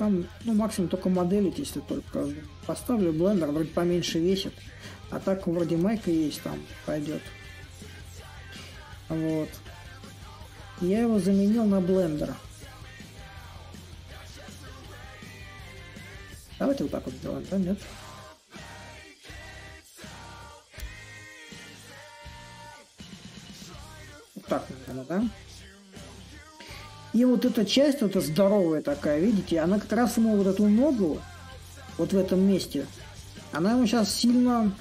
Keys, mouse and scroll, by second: 5.6-10.7 drag, 10.9-16.0 drag, 17.0-22.1 drag, 22.9-28.0 drag, 29.8-34.8 drag.